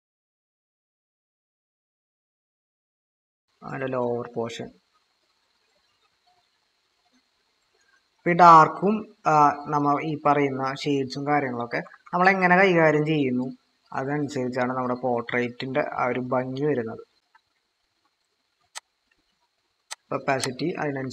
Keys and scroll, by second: 11.8-12.9 typing.